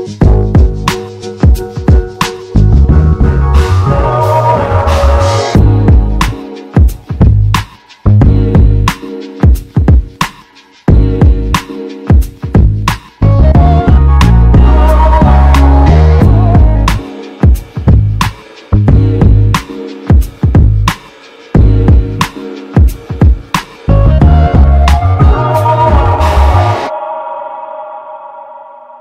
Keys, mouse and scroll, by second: 6.6 e, 28.7 g.